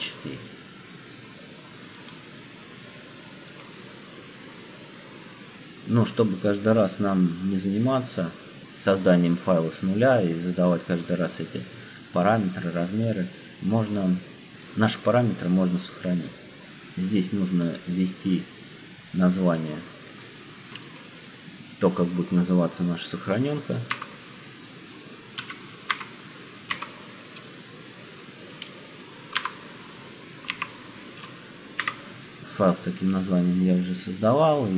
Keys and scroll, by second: 23.8 shift+c, 25.2 m, 25.9 y, 26.7 k, 29.2 shift+-, 30.4 a, 31.7 4.